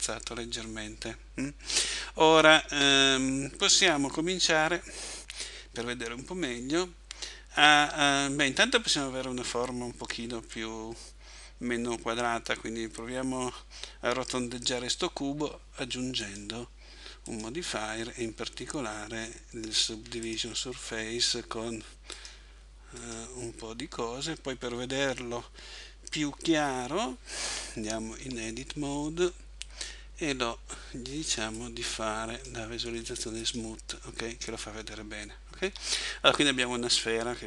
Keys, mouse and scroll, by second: 2.6 Escape, 16.2 click, 22.1 click, 28.2 Tab, 31.6 click, 35.7 Tab.